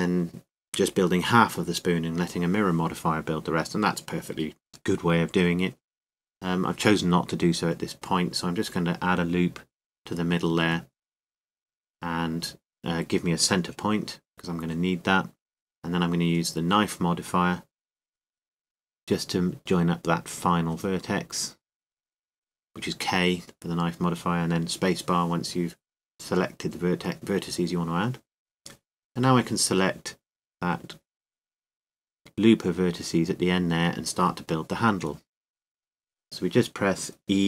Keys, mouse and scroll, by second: 10.4 shift+k, 14.5 ctrl+r, 19.5 k, 28.4 a, 29.2 a, 34.9 click, 37.0 e.